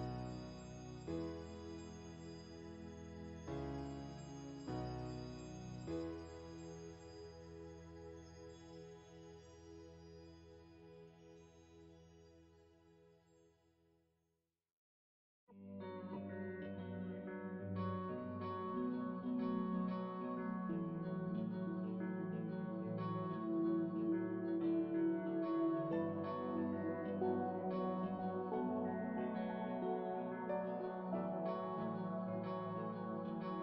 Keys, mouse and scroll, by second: 0.0-1.3 shift+drag, 1.3 middle click, 2.0-10.4 drag, 12.0-13.3 shift+drag, 13.3-14.5 middle drag, 14.5-16.2 shift+drag, 16.2 middle click, 17.1 shift+click, 17.8 middle click, 18.6 shift+click, 19.5 middle click, 20.3 p, 22.2-24.1 drag, 24.1-25.1 middle drag, 25.1 f, 25.8-27.5 middle drag, 27.5-29.6 drag, 29.6 shift+c, 30.6-33.6 drag.